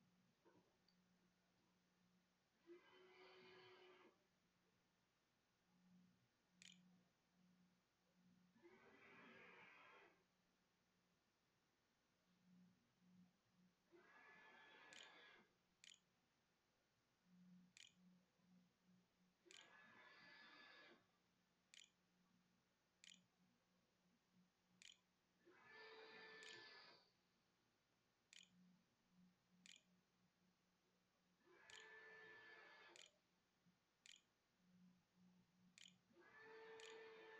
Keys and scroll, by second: 5.2-6.6 typing, 11.1 ', 13.1-18.2 typing, 19.9-31.2 typing, 32.5-37.3 typing, 36.9 shift+Up.